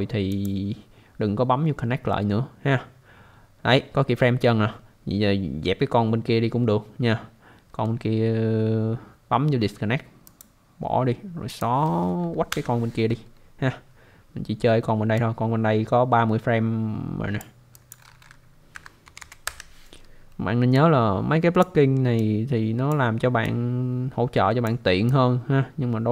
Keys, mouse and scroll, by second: 0.3 click, 4.5 scroll down 1, 10.2 click, 11.5 click, 12.5 Delete, 15.2 click, 17.7 click, 18.7 typing, 19.4 Return, 20.7 click, 22.2 click, 23.4 click, 25.1 click.